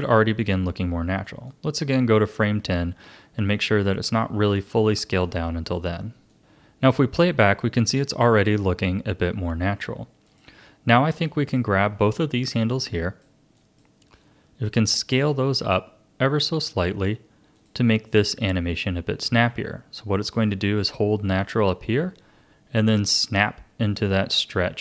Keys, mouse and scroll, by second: 1.5-4.5 drag, 5.2 click, 6.3-8.1 drag, 10.2-11.2 drag, 12.4 shift+click, 13.5 shift+click, 15.3 s, 20.3-23.3 drag.